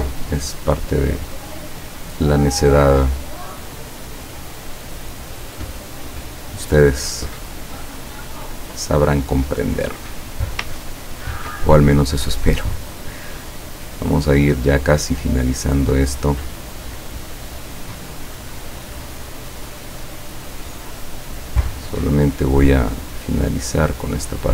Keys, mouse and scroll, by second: 1.4 click, 1.9 click, 3.1 click, 4.2-6.0 drag, 7.3 click, 10.9-11.3 ctrl+scroll up 2, 14.7 click, 18.6 click, 20.5 click, 22.4 click, 23.1 click, 24.1 click.